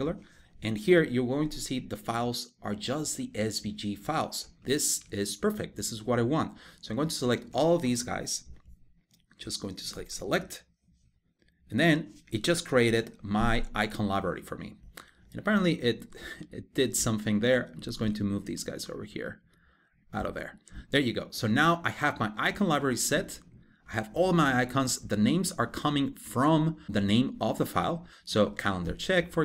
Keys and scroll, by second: 6.6 super+a, 12.5 super+1.